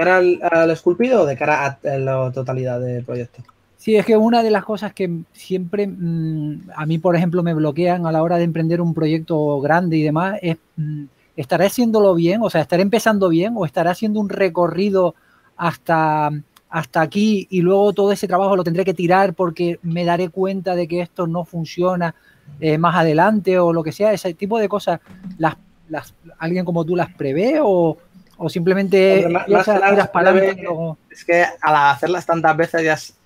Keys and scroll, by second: 3.7 s, 6.2-9.1 typing, 13.0 s, 14.3-15.3 typing, 21.3 s, 30.0-30.7 typing.